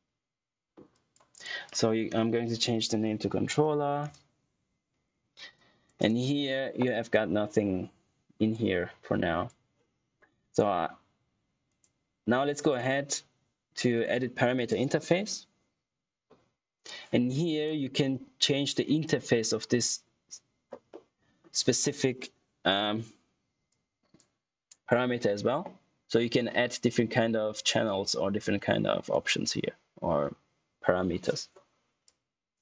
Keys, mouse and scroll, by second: 2.3-4.4 typing, 5.5 click, 8.4 click, 8.6 typing, 11.6 click, 15.8 click, 16.8 click, 19.3 click, 20.8 middle click, 23.6 click, 26.6 scroll down 1, 28.2-29.5 scroll up 1, 29.5-31.4 scroll down 1, 32.0 click, 32.3 typing.